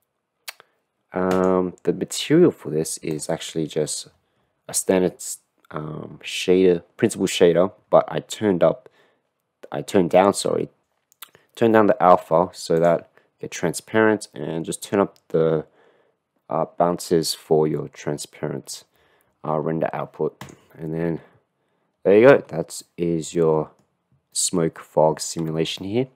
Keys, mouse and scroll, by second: 1.3 click, 12.8 click, 20.3 click, 22.9-24.0 middle drag, 24.3-25.2 middle drag, 25.9 shift+middle click.